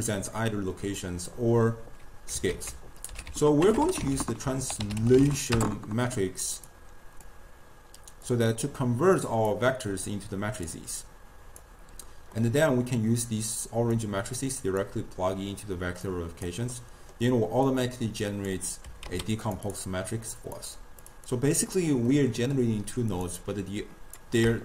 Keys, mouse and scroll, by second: 2.5 ctrl+a, 3.8 BackSpace, 7.3 drag, 9.3 click, 10.1 drag, 11.1 click, 12.4-14.0 middle drag, 14.0 drag, 16.1 click, 16.8-17.8 middle drag, 17.8 click, 18.9 g, 19.8 drag, 21.1-22.2 drag, 22.2-23.2 middle drag, 23.2-24.6 drag.